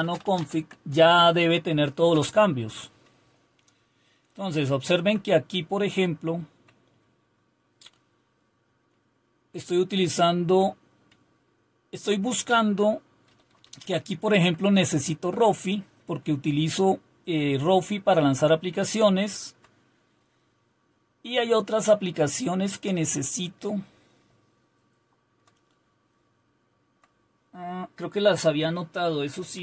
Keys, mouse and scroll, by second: 0.0-0.8 typing, 2.1 typing, 3.2-3.9 typing, 9.6-10.5 Up, 10.2-12.2 typing, 12.4 Down, 13.3 Up, 13.5 Up, 13.8 Up, 14.4 Up, 19.0-19.4 Down, 20.2-21.1 Down, 22.2-23.4 Down, 24.2-25.3 Down, 26.1 Down, 26.8 Down, 26.9 Down.